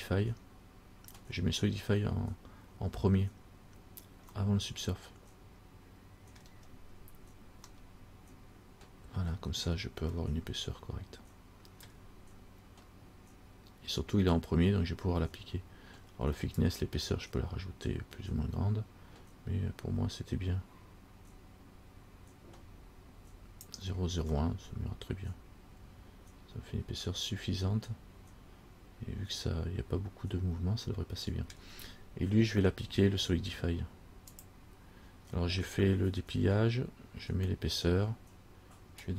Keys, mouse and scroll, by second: 4.6 middle click, 6.9-7.7 scroll up 3, 8.0 middle click, 10.4 middle click, 11.2 scroll, 16.8 click, 24.6 middle click, 34.5 click.